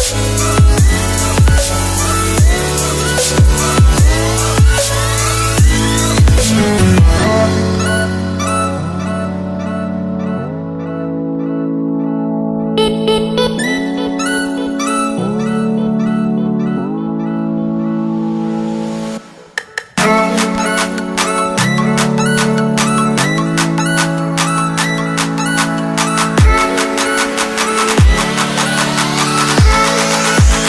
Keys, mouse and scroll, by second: 6.8 KP_Add, 22.4 click.